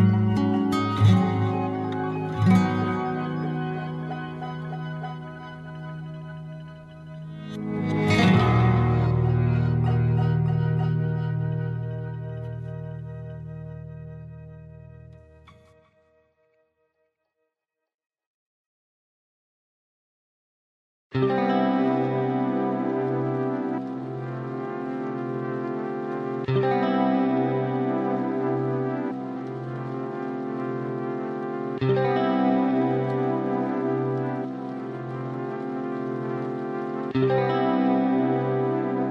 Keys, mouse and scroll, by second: 3.4 click, 7.3 scroll up 4, 7.5-14.5 drag, 18.4-22.4 drag, 23.7 click, 25.1 middle click, 25.8-26.6 scroll down 3, 26.6-27.2 scroll down 3, 27.2-28.0 scroll down 1, 28.0-28.6 scroll down 1, 28.6-31.4 scroll up 4, 31.4 shift+a, 38.1-39.1 drag.